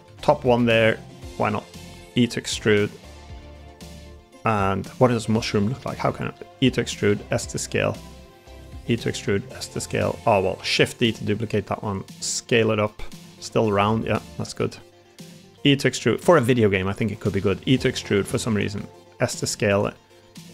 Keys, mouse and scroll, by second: 0.0 alt+z, 0.5 shift+middle click, 0.9 middle click, 3.4 s, 5.3 click, 6.2 e, 6.7 click, 7.0 s, 8.6 e, 8.9 click, 9.2 s, 10.5 shift+d, 11.0 s, 12.6 middle click, 13.2 middle click, 14.5 s, 15.4 e, 17.3 e, 18.6 s, 19.8 middle click, 20.2 3.